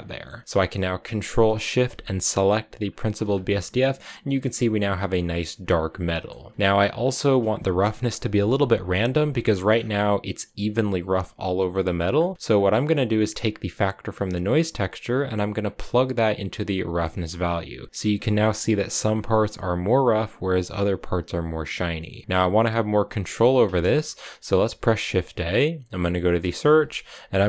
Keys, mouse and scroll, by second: 2.7 ctrl+shift+click, 3.7-5.7 scroll down 3, 5.8 middle click, 6.2-6.5 scroll down 1, 6.5-6.8 scroll up 1, 6.8 click, 9.3 middle click, 9.5-10.3 scroll up 5, 11.5 scroll up 1, 11.6 middle click, 11.9-12.4 scroll down 3, 12.4 click, 14.6-17.6 drag, 17.9-18.9 scroll up 1, 24.5 shift+a.